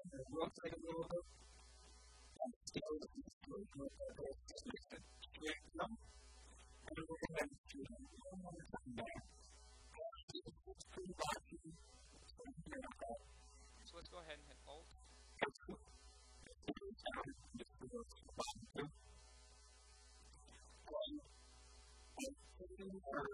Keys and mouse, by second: 0.7 g, 1.6-3.2 drag, 2.3 s, 6.7 e, 8.8-10.1 drag, 9.4 a, 9.9 Tab, 11.1 Tab, 12.5 a, 13.1 a, 15.0-16.9 right drag, 15.7 s, 16.7 a, 17.1-20.2 drag, 17.4 s, 19.0 a, 19.2 KP_1, 20.0 KP_3, 21.5 a, 21.8 a, 22.1 b, 22.5 b.